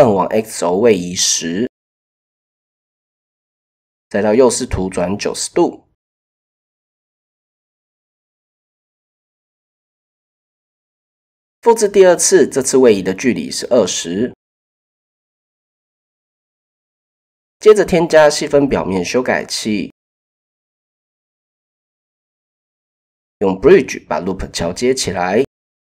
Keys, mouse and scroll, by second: 0.9 click, 3.6 KP_3, 5.1 r, 6.5-7.7 drag, 8.7 KP_1, 9.6 shift+click, 10.1 click, 11.2 shift+d, 12.2 click, 13.7-14.7 drag, 15.5 middle click, 15.7 typing, 19.2 middle click, 20.1 middle click, 20.9 middle click, 22.0 shift+click, 22.6 shift+click, 23.1 shift+click, 24.2 click, 24.8 click, 25.5 shift+click.